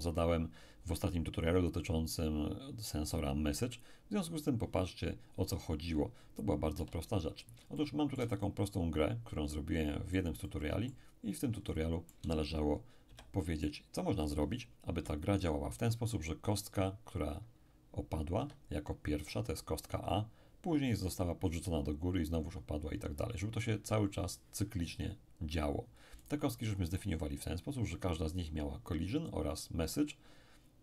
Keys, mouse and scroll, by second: 6.8 1, 7.8-11.0 shift+middle drag, 11.0-11.7 scroll up 1, 11.7-13.1 shift+middle drag, 13.1 shift+p, 14.9 p, 18.4 Escape, 26.2 right click.